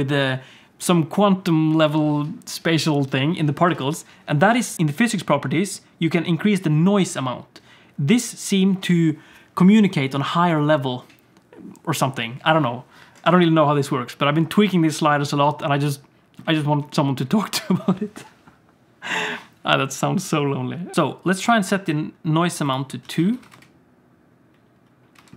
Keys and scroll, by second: 23.0 alt+a, 23.3 ctrl+s, 23.5 space, 25.1 space.